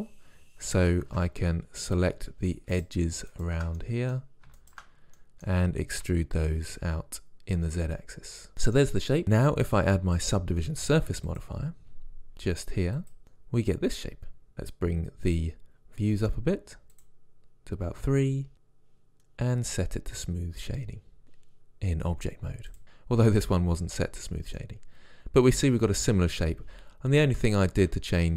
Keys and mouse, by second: 1.1 ctrl+Tab, 2.8-4.7 drag, 4.7 middle click, 6.1 e, 19.9-21.2 middle drag, 21.2 Tab, 27.5 Tab.